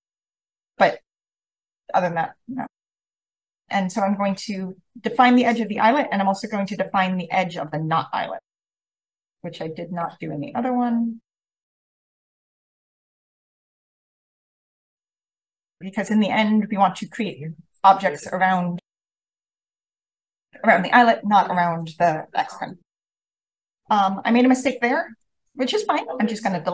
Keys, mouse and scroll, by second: 3.2-4.3 drag, 4.8 v, 5.4-9.2 drag, 5.7-8.9 scroll up 1, 9.9 click, 10.0-10.9 scroll up 1, 10.9 scroll up 1, 10.9-14.7 scroll down 1, 12.1 click, 12.9 drag, 13.4-13.7 drag, 14.7-23.3 scroll up 1, 15.6-20.1 drag, 23.3-23.7 scroll down 1, 23.7-25.4 scroll up 1, 24.0-24.4 drag, 25.1 drag, 25.9 BackSpace.